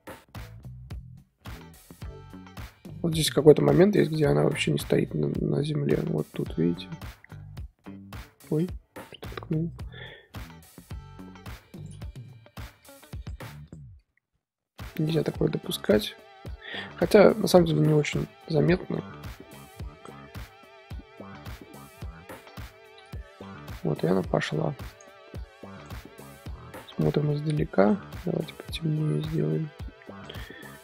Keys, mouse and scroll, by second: 9.1-11.9 drag, 12.5 click, 12.8 r, 13.6 click, 14.0 r, 15.8 drag, 16.0 r, 17.5 drag, 18.6 i, 19.9-22.4 drag, 22.4-22.8 scroll down 10, 22.8-23.6 middle drag, 23.6 z, 24.1-24.9 middle drag, 24.9 click, 25.7 click, 26.2 middle click, 26.4-27.8 scroll up 2, 27.8 click, 28.3 click.